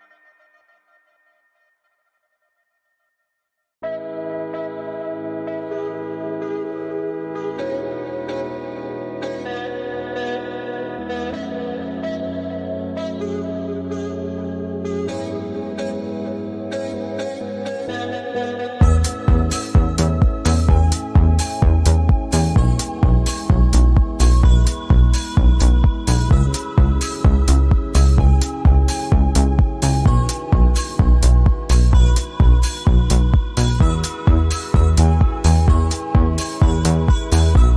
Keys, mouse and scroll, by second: 1.2-2.4 drag, 2.6-3.1 scroll down 1, 3.1-4.7 drag, 4.9 scroll down 1, 5.7-7.6 drag, 7.7-14.2 drag, 14.2-14.6 alt+scroll up 2, 15.7-18.8 drag, 18.8-22.4 drag, 22.4-27.4 drag, 27.4 scroll down 1, 30.1 click, 30.5 v, 31.4-34.2 drag, 34.2 v, 34.3 click, 36.7-37.7 drag.